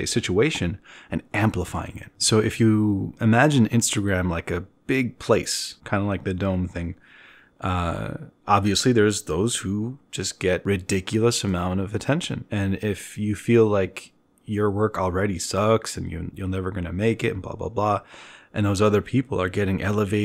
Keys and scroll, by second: 4.9 ctrl+alt+1, 5.2 ctrl+alt+1, 6.1 b.